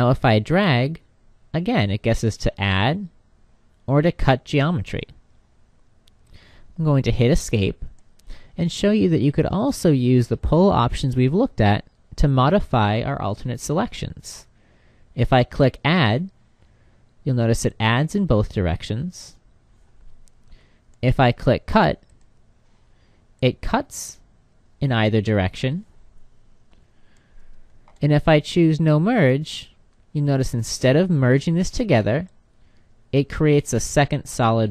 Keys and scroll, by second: 7.0 Escape, 7.8 Escape, 20.0 Escape, 26.2 Escape.